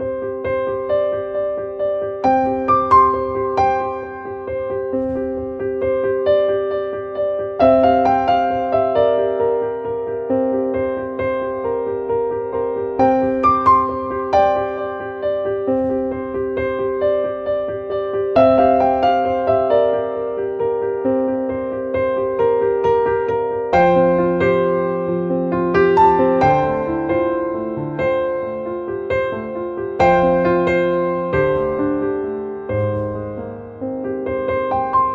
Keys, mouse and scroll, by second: 2.2 click, 9.0 click, 10.0 click, 10.6 click, 12.2-15.9 drag, 16.9 click, 18.6 click, 22.4 click.